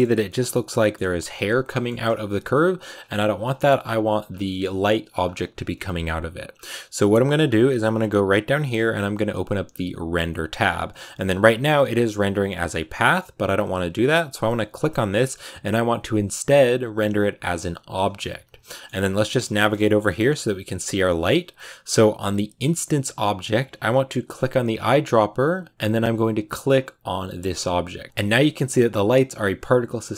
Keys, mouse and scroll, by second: 1.9 g, 4.1 scroll down 2, 4.3 middle click, 5.1-5.4 scroll up 2, 18.5 shift+middle click, 18.9 scroll down 1, 19.0-25.5 shift+middle drag, 25.5 click, 27.7 shift+middle click, 28.2-28.5 scroll up 1, 29.2-30.1 middle drag.